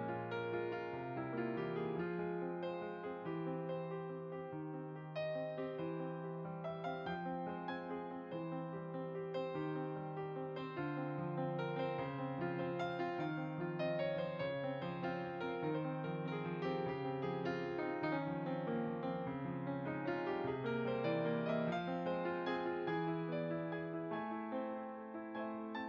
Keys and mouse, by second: 0.0 Tab, 1.5 click, 3.0 s, 5.1 click, 6.0 e, 7.6 z, 8.0 click, 11.6 click, 12.1 s, 12.9 click, 14.5 click, 21.1 s, 21.6 click, 24.8 Tab.